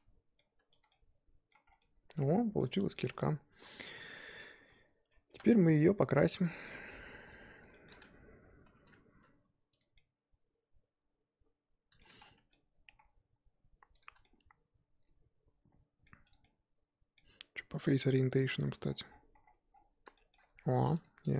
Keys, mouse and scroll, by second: 0.4 Tab, 0.8 click, 0.9-1.6 middle drag, 1.6 scroll down 4, 1.8-2.3 middle drag, 2.8 middle click, 3.5 KP_1, 4.4-5.1 scroll up 5, 5.1-7.3 shift+middle drag, 7.3 click, 7.7 shift+middle drag, 7.9-8.6 scroll up 6, 8.6 Tab, 9.7 drag, 9.9-12.2 middle drag, 12.2 scroll down 3, 12.3 Tab, 12.5-13.0 middle drag, 13.0-13.9 scroll up 2, 14.0 click, 14.2-16.3 middle drag, 16.3 click, 16.5-18.6 middle drag, 18.6 click, 18.8-19.3 scroll down 10, 19.3 scroll up 1, 19.5-20.1 scroll down 4, 20.1 shift+middle drag, 20.3-21.3 scroll up 7, 21.3 click.